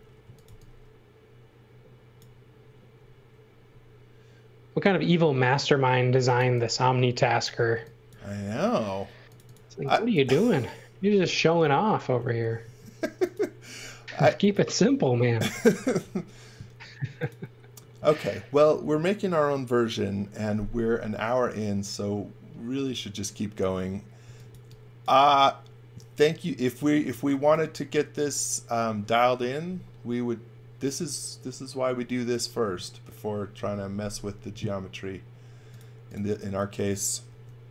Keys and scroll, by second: 0.0-1.0 typing, 6.1 x, 6.4 v, 7.5 space, 12.2 m, 15.4 space, 24.0-25.0 typing, 27.1 x, 35.5 space, 37.3 m.